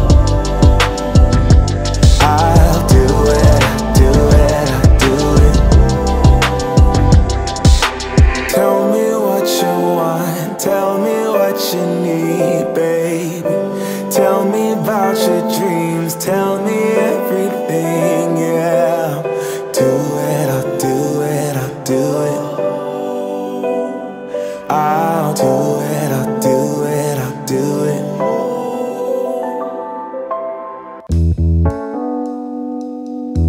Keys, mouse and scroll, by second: 6.2 0, 7.5 click, 9.6-14.0 drag, 12.4 3, 20.6 space, 25.4 click, 26.3 space, 31.7-33.2 drag, 33.2 space.